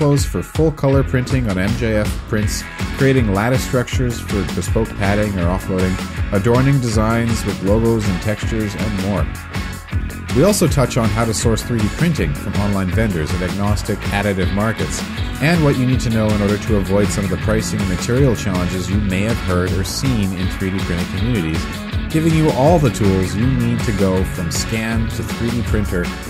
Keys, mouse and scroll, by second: 2.9 q, 6.7 ctrl+z, 10.1 Right, 10.3 Return, 10.3 d.